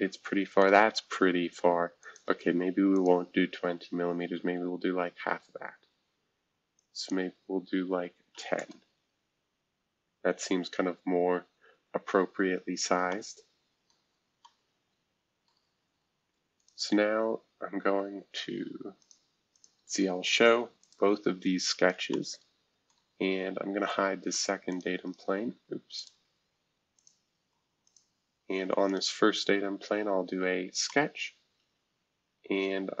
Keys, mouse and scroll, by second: 1.2-2.0 scroll down 1, 2.0-4.5 drag, 4.5-5.3 scroll down 1, 5.3-6.7 scroll down 1, 6.7-8.3 drag, 8.0-8.8 typing, 10.7-11.1 scroll down 2, 11.1-11.8 scroll up 2, 11.8-12.7 scroll up 1, 13.9 middle click, 15.5-16.5 middle drag, 16.5 click, 19.0-22.1 drag, 22.9-23.9 middle drag, 23.9-24.3 scroll down 1, 24.3 click, 25.9 click, 27.4 space, 27.8 click, 28.9 click, 30.8-33.0 middle drag, 30.8-33.0 scroll up 1.